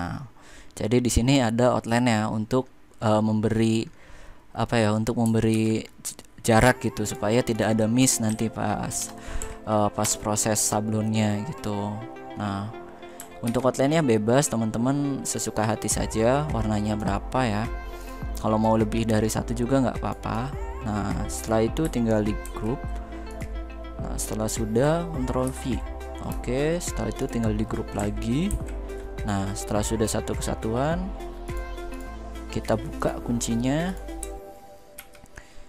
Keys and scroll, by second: 5.2 ctrl+z, 8.0 Right, 8.7 BackSpace, 9.1 2, 9.7 Return, 13.2 ctrl+z, 22.1 ctrl+g, 23.5 ctrl+g, 25.2 ctrl+v, 28.2 ctrl+g, 34.7 ctrl+x.